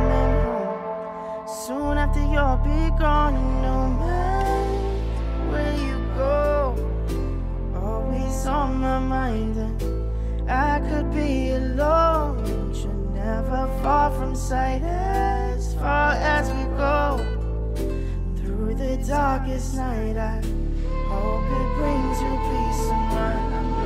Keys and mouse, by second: 0.8 click, 1.6 middle click, 2.3 click, 3.1 click, 3.2 click, 3.3 click, 3.4 click, 3.5 click, 3.9 g, 5.2 g, 7.6 r, 11.4 g, 13.2 click, 13.3 middle drag, 13.7 shift+middle click, 14.2 click, 15.3 middle drag, 15.7 click, 17.3-18.7 drag, 18.7 BackSpace, 18.8-19.2 BackSpace, 20.4 click, 21.1 click, 21.5 click, 22.2 click, 23.1 click.